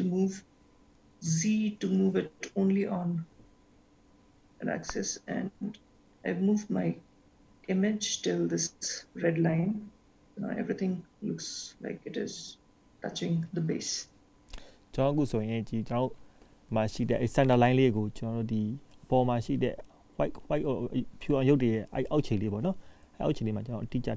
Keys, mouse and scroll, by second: 11.1-12.4 scroll down 1, 12.4-12.7 scroll down 1, 15.3-16.1 scroll down 2, 16.1-18.1 scroll up 1.